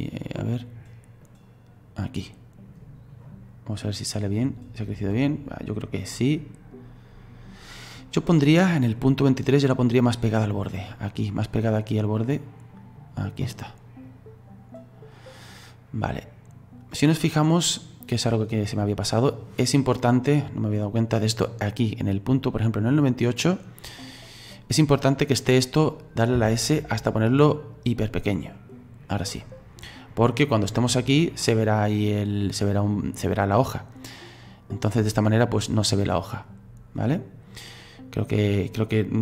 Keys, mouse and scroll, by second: 9.8-17.1 drag, 18.8-20.8 middle drag, 20.8 right click, 22.0-25.1 drag, 29.4 click, 30.1 click, 30.9 right click, 32.3 right click, 33.8-36.8 drag.